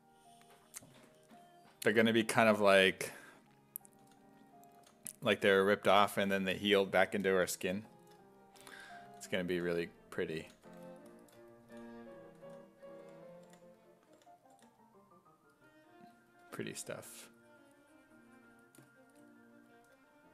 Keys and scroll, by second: 3.0 s, 4.1 s, 4.8 s, 5.5 s, 9.1-14.6 typing, 16.5 4.